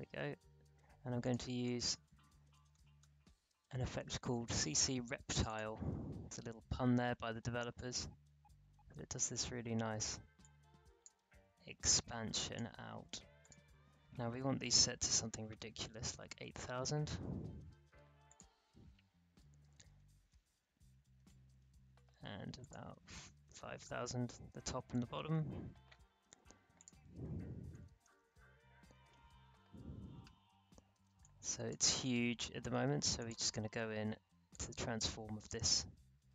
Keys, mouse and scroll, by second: 1.2 click, 2.4-3.5 typing, 5.3 click, 7.7-13.4 drag, 15.2-16.5 typing, 16.6 Return, 18.2 click, 19.7-21.0 typing, 21.1 Return, 22.6 click, 23.3-24.9 typing, 25.1 Return, 26.7 click, 27.4-28.7 typing, 28.9 Return, 30.0-30.4 alt+scroll down 1, 30.4-31.0 alt+scroll up 1, 31.0 alt+space, 31.2 click, 31.5 space, 33.1-36.3 drag.